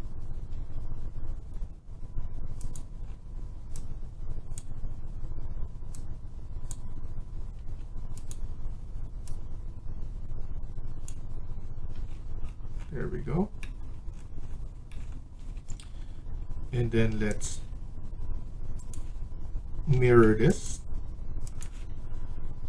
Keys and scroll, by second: 0.4 Escape, 7.4 Escape, 11.9 Escape, 12.9 Escape, 15.2 Escape, 15.6 Escape.